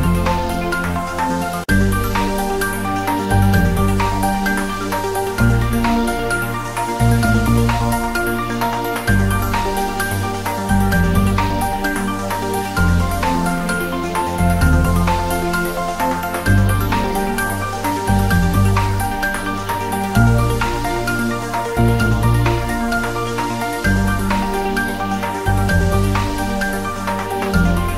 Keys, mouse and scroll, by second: 0.2 g, 0.9 click, 1.4 g, 1.9 click, 2.3 scroll down 1, 2.6 click, 3.5-3.8 scroll up 1, 4.3 click, 4.7 right click, 4.8 click, 5.6-6.9 drag, 6.9 scroll down 1, 7.0-8.5 typing, 8.2 click, 10.6-12.6 drag, 12.6 scroll up 1, 12.8 s, 14.4 click, 15.1 scroll down 1, 15.4 click, 15.7 ctrl+s, 16.1 click, 16.2-16.6 scroll up 1, 16.6 s, 17.4 click, 17.9-18.3 scroll down 1, 18.3 click, 19.0-19.5 scroll down 1, 19.9 click, 20.8 click, 21.1 scroll up 1, 21.3 s, 22.0-23.8 drag, 23.8 scroll down 1.